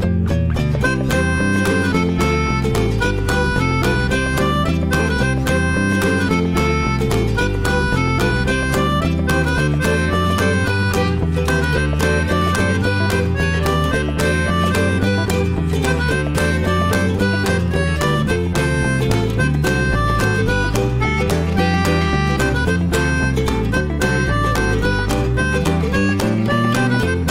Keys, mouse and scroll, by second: 3.6-5.6 drag, 5.6-6.7 middle drag, 6.7 scroll up 2, 6.9-8.7 shift+middle drag, 8.7-11.5 drag, 11.5 scroll down 1, 11.7-13.0 shift+middle drag, 13.0 drag, 13.3 click, 13.7-14.4 middle drag, 14.4 click, 15.7 click, 15.9 scroll down 2, 16.1-17.3 middle drag, 17.3 click, 17.7 shift+middle click, 18.7 click, 19.4 click, 20.2-20.7 drag, 21.5 click, 22.3 Delete, 22.5 drag, 22.7-23.1 scroll down 1, 23.1-24.2 shift+middle drag, 24.2 click, 24.4-25.1 right drag, 25.1 drag, 25.5 shift+middle drag, 25.8 scroll down 1, 25.9-27.3 middle drag.